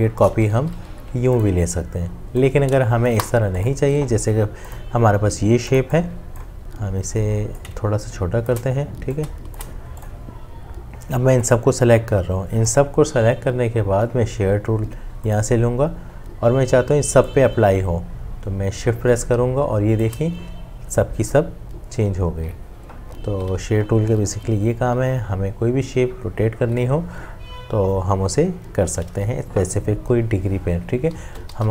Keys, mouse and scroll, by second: 0.5 ctrl+d, 3.1 Delete, 7.6 alt+click, 9.2 alt+shift+click, 17.9 shift+click, 31.1 z, 31.6 z.